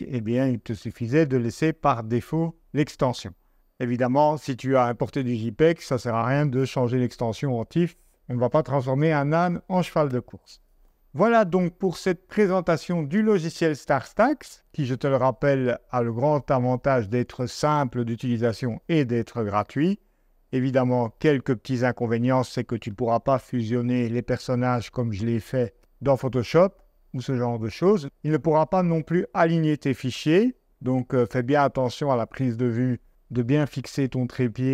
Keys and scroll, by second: 11.0 super+Tab.